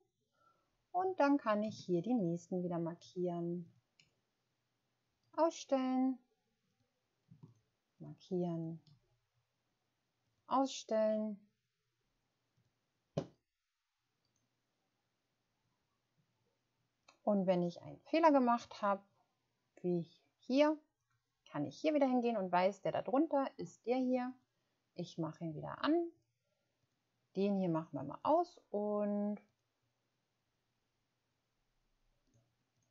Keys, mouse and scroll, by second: 1.7 shift+click, 2.9 shift+click, 7.4 shift+click, 32.7 click.